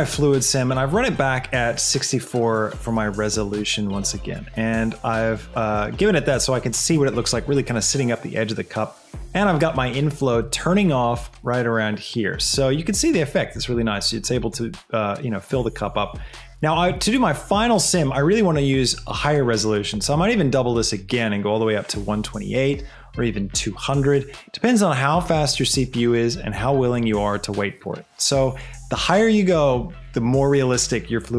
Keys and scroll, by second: 1.1 space, 3.7 space, 17.6 space.